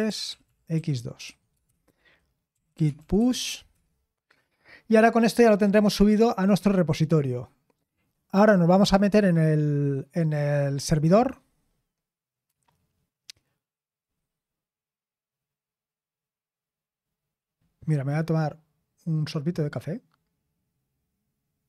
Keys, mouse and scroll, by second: 0.0-4.9 typing.